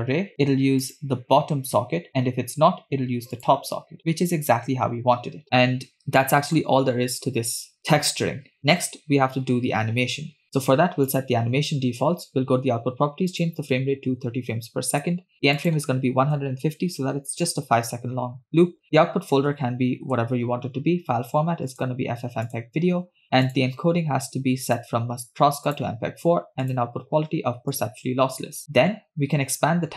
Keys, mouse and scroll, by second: 0.2-0.6 scroll down 2, 0.3 middle click, 0.9 click, 3.4 click, 4.0-4.9 scroll down 1, 5.6 space, 5.9 space, 6.2 middle click, 7.2-7.6 scroll down 3, 7.6 scroll up 2, 11.1 click, 13.3-15.2 drag, 15.6-17.4 drag, 18.8-20.2 drag, 19.7 /, 21.7-22.8 drag, 23.1-23.4 scroll down 2, 23.5 click, 23.8 scroll down 2, 24.7-25.9 drag, 26.7-28.0 drag.